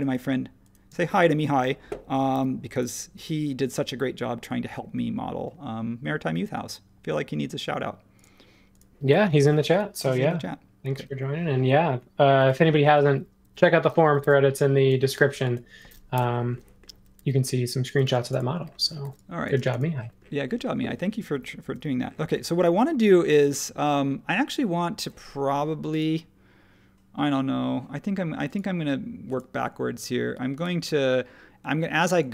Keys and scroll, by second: 0.9 space, 2.3 super+g, 13.4 r, 14.2 e, 16.1 BackSpace, 17.2 e, 18.0 space, 19.0 e, 19.5 space, 21.6 super+1.